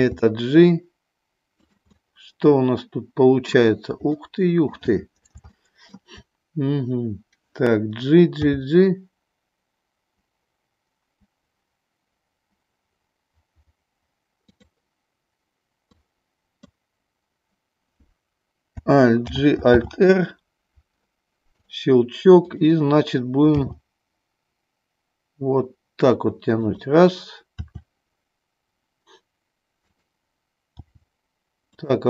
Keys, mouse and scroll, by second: 1.6 click, 1.9 scroll up 1, 2.0-3.6 middle drag, 4.2 middle click, 5.4 shift+middle click, 8.4 g, 15.9 click, 19.3 alt+g, 19.6 alt+r, 21.5 click, 23.5 g, 26.7 click, 27.7 r, 29.9 click, 30.9 g, 31.8 click.